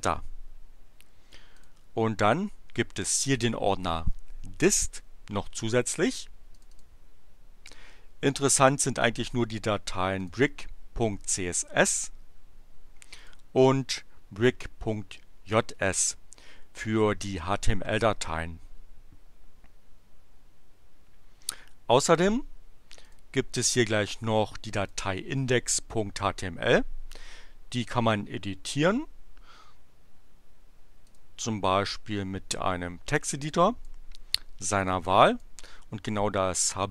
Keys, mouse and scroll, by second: 1.5 click, 3.2 click, 6.5 click, 10.1 click, 13.2 click, 23.0 click, 24.0 click, 24.8 click, 31.0 click, 33.2 click, 34.7 click.